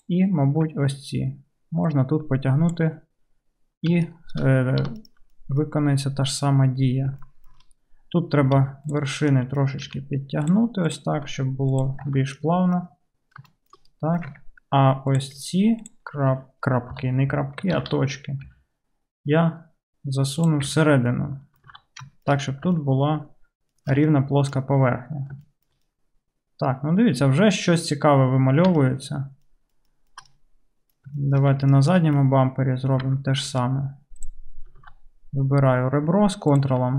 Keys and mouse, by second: 0.0 ctrl+middle click, 0.1-2.0 ctrl+drag, 5.1-9.0 alt+middle drag, 5.5-8.6 drag, 5.5-8.6 right drag, 8.6 1, 9.0-10.9 drag, 9.9 g, 10.9 middle click, 11.0-21.9 drag, 11.2 g, 12.1 Tab, 14.4 Tab, 15.9 ctrl+middle click, 15.9 ctrl+right click, 17.0 KP_3, 17.8 alt+z, 18.5 g, 20.7 Tab, 21.7 alt+z, 21.9-24.9 shift+middle drag, 24.9-34.2 right drag, 31.8 alt+middle click, 33.1 Tab, 33.5 2, 34.2 middle click, 34.9 alt+z.